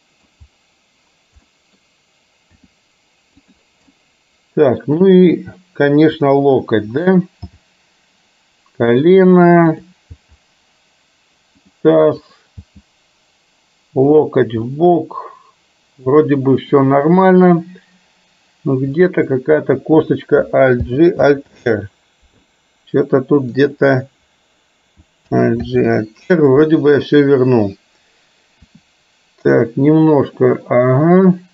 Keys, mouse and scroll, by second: 0.0 middle click, 1.5 middle click, 2.6 r, 4.0-5.0 middle drag, 6.1-6.5 drag, 7.6 g, 9.9 click, 10.3 g, 12.4 click, 12.8 g, 14.8-16.9 middle drag, 21.0 alt+g, 21.4 alt+r, 23.8 click, 25.4 alt+g, 25.6 alt+r, 28.6 r.